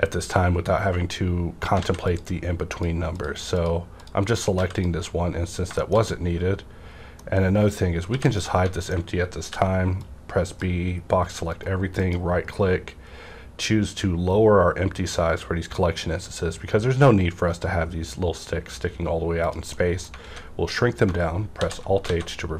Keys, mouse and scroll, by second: 1.1 scroll up 1, 1.8 alt+a, 2.0 click, 2.1 click, 2.6 click, 4.5 x, 4.7 click, 5.8 middle click, 7.6 click, 8.0 h, 8.3-10.0 middle drag, 9.4 b, 10.0-12.0 drag, 11.4 right click, 19.4 click, 19.4 click, 19.7-21.5 middle drag, 20.2 alt+a, 21.5 alt+h, 22.1 alt+a.